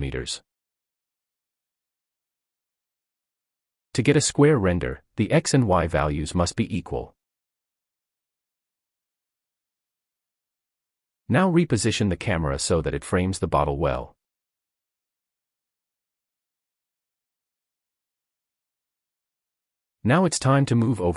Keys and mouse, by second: 3.1 middle click, 4.4-7.9 middle drag, 10.6 g, 11.1 x, 16.7 click.